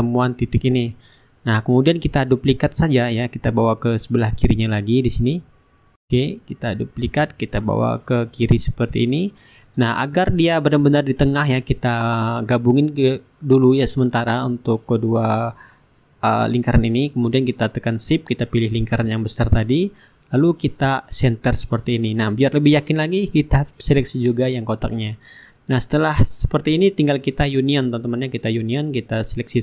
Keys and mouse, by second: 1.8 shift+right click, 2.6 click, 6.8 ctrl+d, 8.0-10.7 ctrl+drag, 11.5 shift+click, 14.7-15.8 right drag, 15.9 click, 19.3 shift+click, 20.7 click, 22.8-26.9 shift+drag, 25.0-26.9 shift+right drag, 25.8-26.9 middle drag, 27.3-29.6 drag.